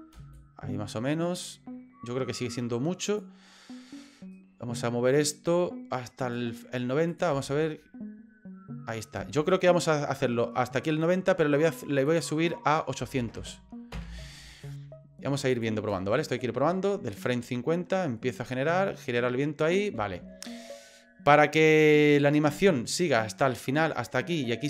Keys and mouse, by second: 0.1 space, 0.3-3.2 drag, 4.3-6.3 right drag, 7.1 click, 7.3 space, 9.2 space, 9.5-10.9 drag, 12.2-14.5 drag, 13.4 KP_0, 15.5 click, 15.9 space, 19.9 space, 20.5-24.6 drag.